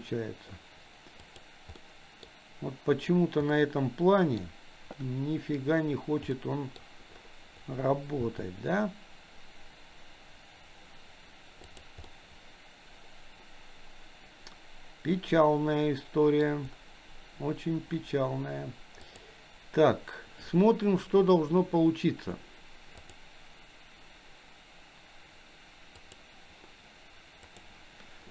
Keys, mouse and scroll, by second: 1.8-2.2 middle drag, 3.5-4.4 middle drag, 4.4-5.4 scroll down 1, 6.5 middle click, 6.8-7.1 scroll down 1, 8.2 g, 12.1-16.7 middle drag, 16.5 scroll down 1, 19.1 click, 23.0-27.8 drag.